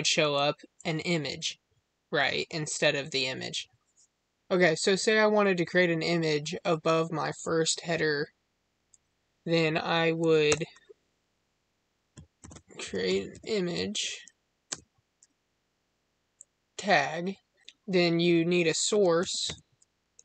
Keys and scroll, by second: 14.6 space.